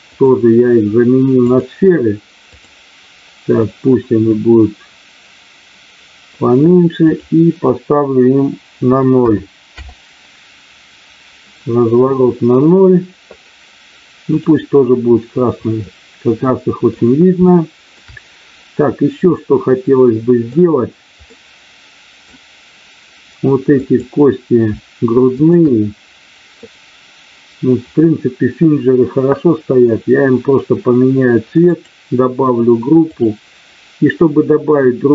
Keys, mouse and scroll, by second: 0.0-1.5 drag, 2.5 click, 7.0-11.3 drag, 15.8-16.8 middle drag, 17.4 shift+middle click, 19.2-20.4 middle drag, 21.3 middle click, 23.7 click, 25.3 shift+click, 31.7 click, 33.2-35.1 drag.